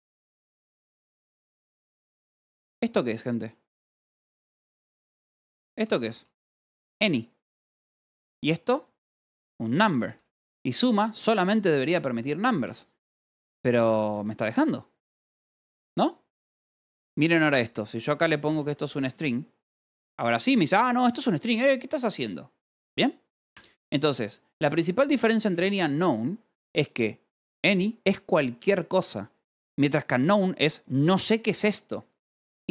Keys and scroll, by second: 0.6 ;, 0.7 Escape, 1.2 j, 1.9 h, 5.1-6.5 typing, 7.4 Escape, 7.6-10.5 typing, 11.5 Escape, 11.7 k, 12.9 k, 13.8 j, 15.1-19.9 typing, 21.0 h, 23.5 u, 24.6 v, 25.2 e, 25.3 Escape, 25.7 j.